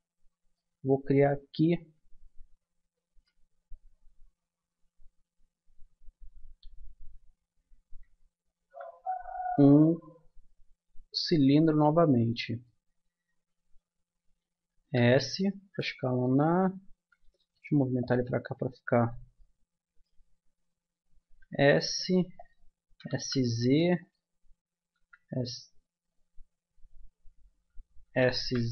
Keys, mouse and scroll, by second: 2.9 a, 6.7 ctrl+z, 8.4 shift+a, 14.8 s, 16.1 click, 17.4 g, 18.3-19.3 drag, 21.2 s, 22.9 s, 24.9 z, 26.9 z, 28.1 s.